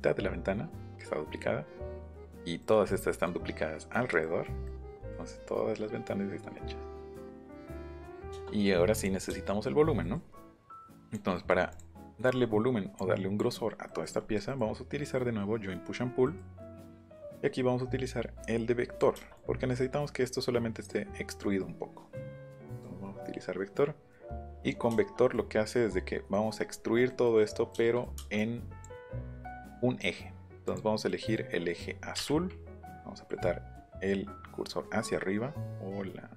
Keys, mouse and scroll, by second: 2.6 middle click, 3.1 middle click, 8.9 click, 10.8 click, 11.0 click, 11.3 middle click, 11.7 click, 12.0 middle click, 13.0 click, 13.9 middle click, 14.5 middle click, 16.3 middle click, 16.8 middle click, 19.0 middle click, 19.5 middle click, 22.7 click, 24.6 middle click, 25.2 middle click, 25.5 middle click, 26.3 middle click, 26.7 middle click, 27.1 middle click, 27.7 middle click, 28.4 click, 30.7 click, 32.1 Up.